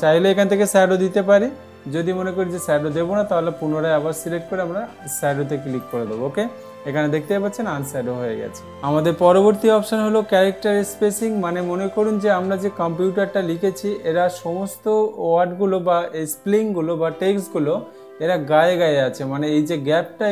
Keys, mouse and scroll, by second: 2.6 ctrl+a, 6.4 click, 7.8 click.